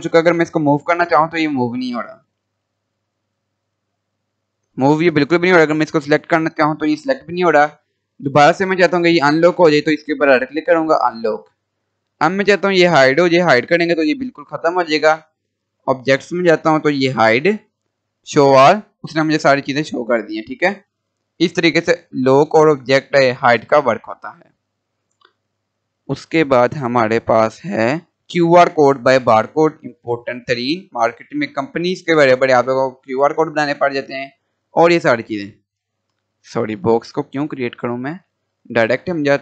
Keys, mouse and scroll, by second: 8.4 right click, 11.0 click, 12.0 right click, 13.1 click, 14.0 scroll down 1, 15.4 click, 18.3 click, 19.3 scroll down 1, 19.8-20.1 scroll up 1, 23.6 Delete, 26.5 click, 29.4 click, 30.2 scroll down 1, 31.3 scroll up 1, 33.4-37.2 drag, 37.9 Delete.